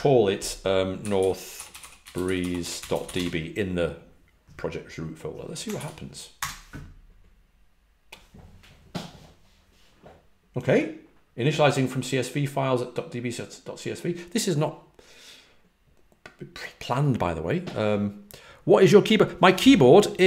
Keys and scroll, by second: 1.2-3.6 typing.